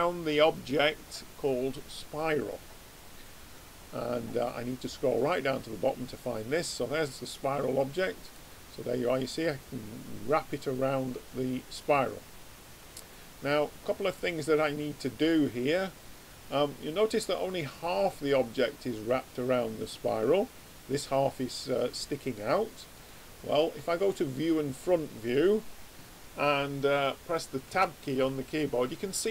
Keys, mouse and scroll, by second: 8.4-11.3 middle drag, 14.0-16.4 middle drag, 22.9 click, 27.7 Tab, 28.4 middle click.